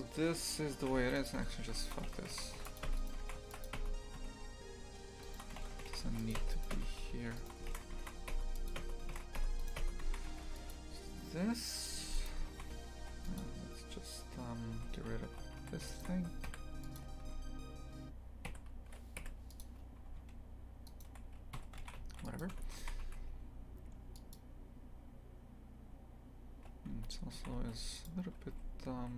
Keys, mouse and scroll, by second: 0.8 shift+f, 1.8 alt+shift+right click, 2.1 ctrl+x, 2.3 shift+f, 2.9 Tab, 3.0 right click, 3.3 shift+f, 3.8 Tab, 4.2 a, 5.2 alt+shift+right click, 5.6 ctrl+x, 5.9 shift+f, 6.4 Tab, 6.5 right click, 6.7 Tab, 7.0 a, 7.4 alt+shift+right click, 7.7 ctrl+x, 8.3 Tab, 8.7 click, 8.8 Tab, 9.6 right click, 9.8 Tab, 10.1 shift+f, 12.3 click, 12.5 shift+f, 15.6 3, 15.9 alt+shift+right click, 17.0 Delete, 17.2 2, 18.5 l, 19.6 Delete, 20.9 alt+shift+right click, 21.6 f, 22.5 Tab, 22.8 shift+f, 26.9 Tab, 27.4 shift+f, 29.0 a.